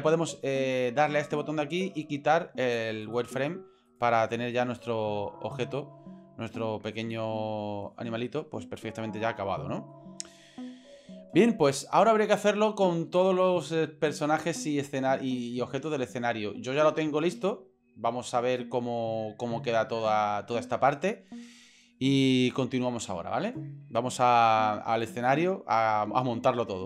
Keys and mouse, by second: 1.2-3.5 drag, 3.8 right click, 4.3-7.9 middle drag, 9.6 middle click.